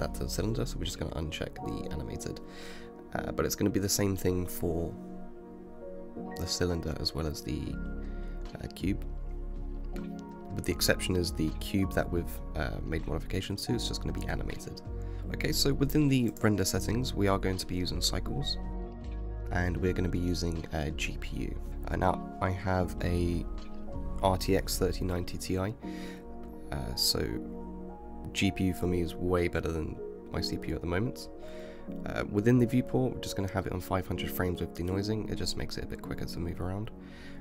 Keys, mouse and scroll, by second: 0.3 click, 1.4 click, 3.9 click, 6.3 click, 9.7 click, 11.0-15.2 drag, 15.7-18.8 drag, 21.2-21.7 drag, 26.3 click, 27.9-29.9 drag, 29.9 KP_0, 31.7-35.3 middle drag, 36.5-37.4 drag.